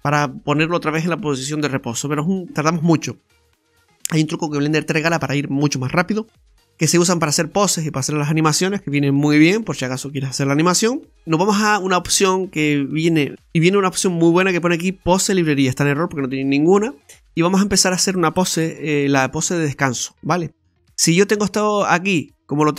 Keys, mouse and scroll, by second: 0.1-0.6 scroll up 1, 2.4-3.4 scroll down 2, 6.7 scroll up 1, 13.5 click, 15.1 click, 17.0 scroll up 1, 18.6-19.4 scroll up 2, 18.6 KP_3, 19.4 shift+middle click.